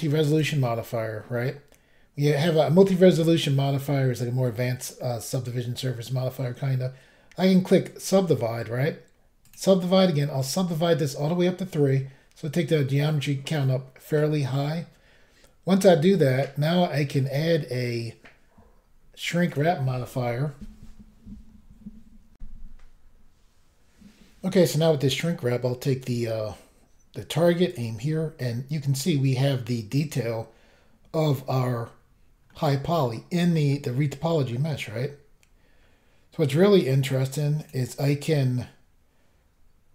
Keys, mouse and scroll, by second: 0.3 click, 0.4 click, 8.0 click, 8.1 click, 9.4 click, 9.5 click, 10.4 click, 10.4 click, 17.2 click, 17.3 click, 19.5 click, 19.5 click, 22.4 Insert, 26.0 click, 26.0 click, 27.7 click, 27.7 click, 32.5 middle click, 33.7 middle click, 34.6-35.2 scroll up 1, 35.8 scroll down 1, 37.6 click, 37.7 click.